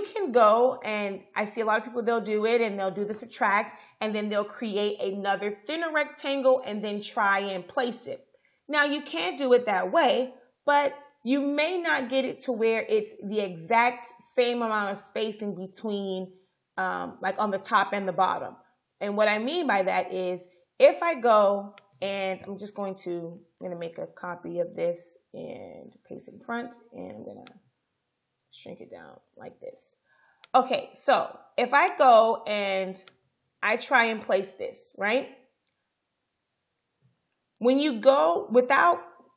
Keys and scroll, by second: 23.9 ctrl+c, 26.1 ctrl+f.